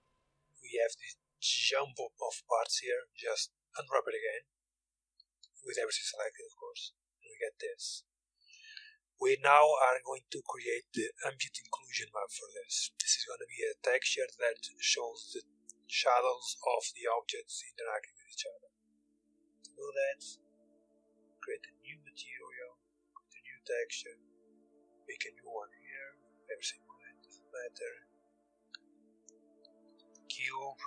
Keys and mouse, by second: 1.3-3.4 drag, 2.8 u, 4.7 a, 4.8 a, 9.5-10.6 drag, 10.6 middle click, 11.1 click, 11.4-12.6 middle drag, 14.0-16.6 middle drag, 19.4-26.0 drag.